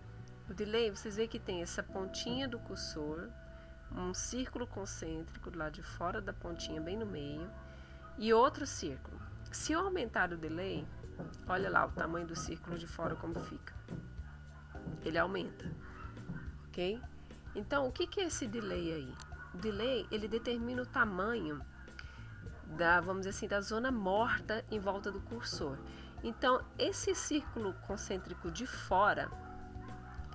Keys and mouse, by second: 2.7 click, 10.1 click, 16.2-18.0 drag, 29.3 click.